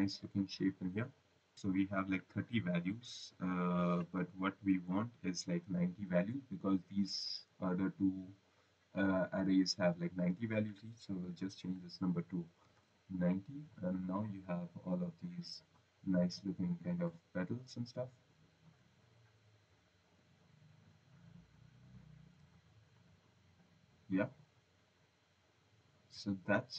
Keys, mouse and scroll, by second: 10.2 click, 11.3 click, 12.5-13.3 typing, 14.0 click, 20.0 click, 22.8 click, 23.3-24.0 scroll, 24.3 right click, 25.1 scroll, 25.5 right click, 25.9 right click.